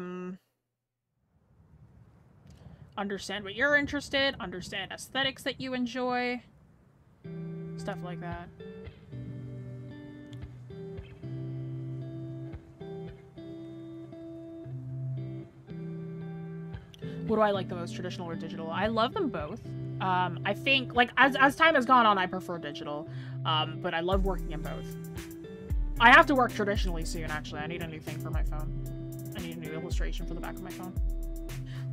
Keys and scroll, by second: 29.7 ctrl+z.